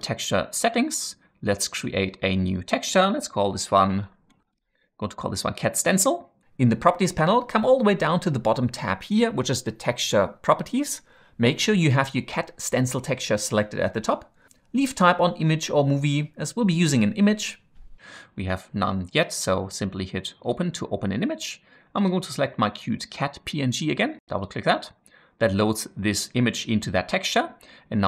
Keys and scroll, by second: 3.7-5.4 typing.